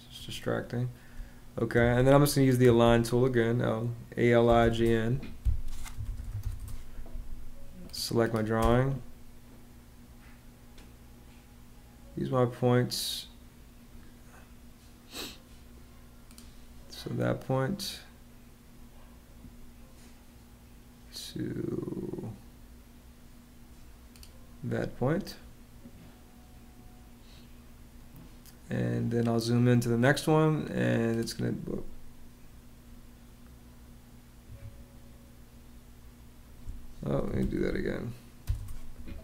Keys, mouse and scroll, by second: 0.9 space, 2.4-3.1 typing, 4.1-6.7 typing, 5.2 Escape, 8.3 space, 34.2 Escape, 36.8-38.2 typing, 38.3 Return.